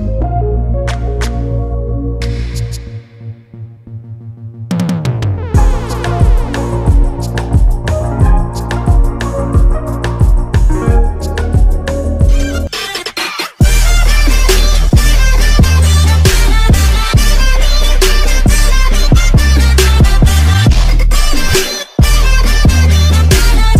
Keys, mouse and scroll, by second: 1.4 click, 4.9 click, 5.5 ctrl+s.